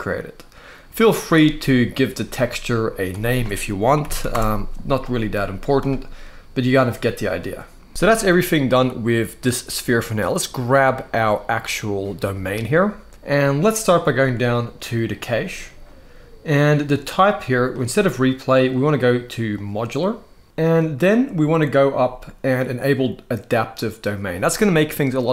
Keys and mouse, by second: 1.0 click, 2.8-4.0 drag, 5.5 click, 10.3 click, 17.6-19.4 drag.